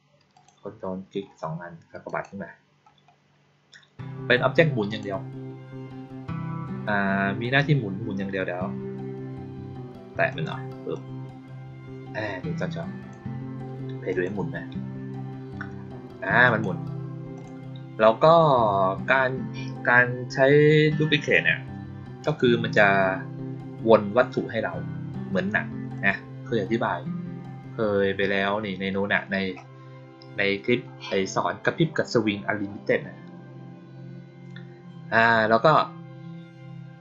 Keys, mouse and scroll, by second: 0.2 ctrl+click, 2.0 click, 4.8 click, 10.2 click, 10.8-13.0 drag, 14.0 click, 16.3 click, 17.3 click, 22.2 click, 25.8 click.